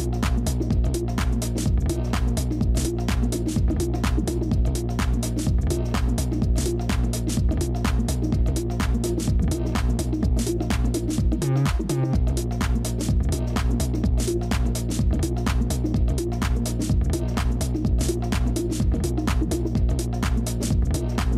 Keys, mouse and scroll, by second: 5.0 double click, 10.4 double click, 16.9 double click, 18.5 ctrl+0, 19.3 ctrl+-, 20.5 space.